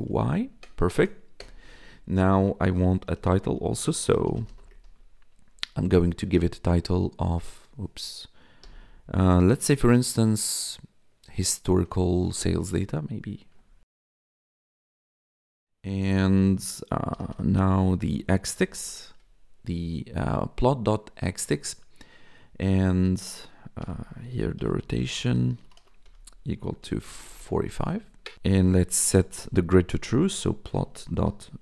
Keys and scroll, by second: 0.2 ctrl+Right, 1.3 Return, 2.8-6.1 typing, 5.4 Return, 7.5 Delete, 8.6 ', 12.0 Escape, 13.7-19.2 typing, 21.3 Tab, 23.5-31.6 typing.